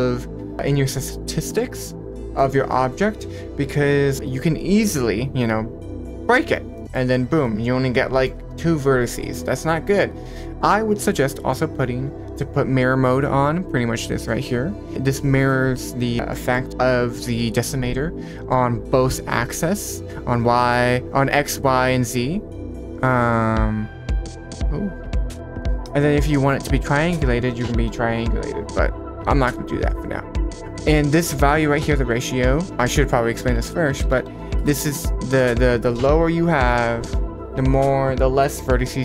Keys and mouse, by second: 6.7 middle click, 7.4-8.2 middle drag, 10.3 click, 16.3 middle click, 21.7 click, 30.9 click, 32.3-34.7 drag, 33.6 BackSpace, 34.0 BackSpace, 34.2 BackSpace.